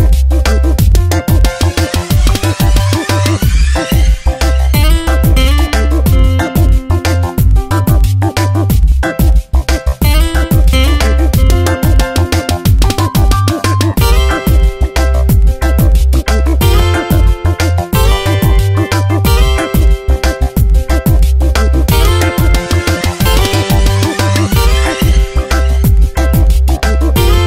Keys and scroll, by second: 2.0 space, 6.3 space, 9.5 space, 13.1 ctrl+z, 16.6 space, 19.2 space, 23.3 space, 26.8 space.